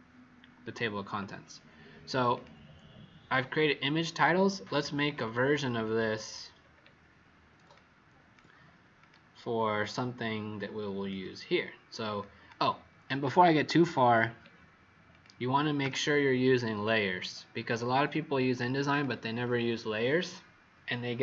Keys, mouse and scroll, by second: 5.1 alt+scroll down 1, 6.3 scroll up 2, 7.8 click, 8.9 click, 9.8 alt+click, 13.9-15.1 scroll down 4, 15.1 click, 15.8 z, 16.8 click.